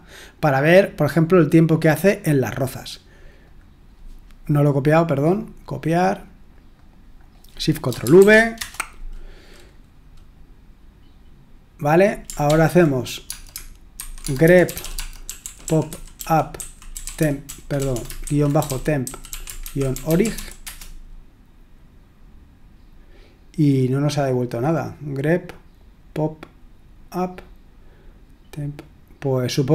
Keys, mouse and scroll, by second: 3.4 click, 5.2 right click, 6.5-7.9 drag, 8.2 ctrl+v, 8.6 Return, 12.4 ctrl+p, 13.3-21.0 typing.